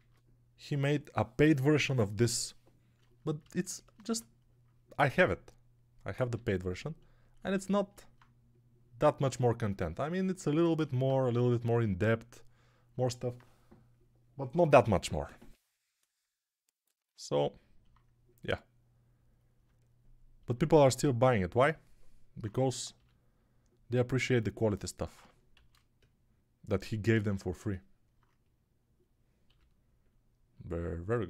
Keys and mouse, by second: 3.9 Tab, 6.2 g, 9.2-19.5 alt+drag, 9.2-12.8 alt+middle drag, 9.2-12.8 alt+right drag, 11.2 g, 17.0-19.5 alt+middle drag, 17.0-19.5 alt+right drag, 22.8 g, 24.2-27.5 alt+drag, 25.4 shift+d, 29.3 g.